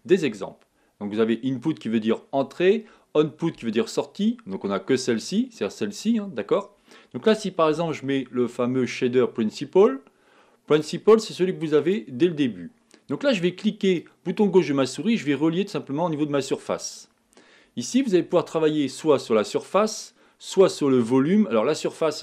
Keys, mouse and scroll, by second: 16.8 click.